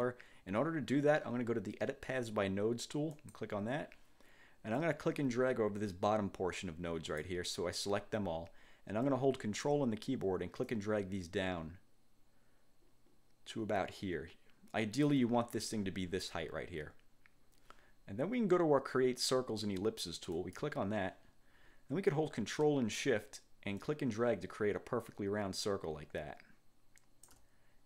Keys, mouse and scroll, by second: 3.3 click, 4.9-7.5 drag, 10.8-15.3 ctrl+drag, 20.5 click, 23.9-27.6 ctrl+shift+drag.